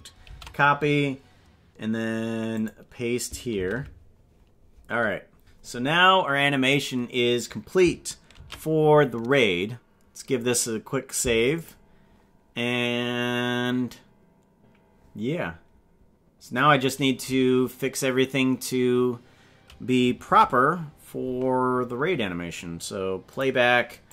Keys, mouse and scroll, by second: 3.5 ctrl+v, 8.5 ctrl+s, 11.7 click, 23.3 click.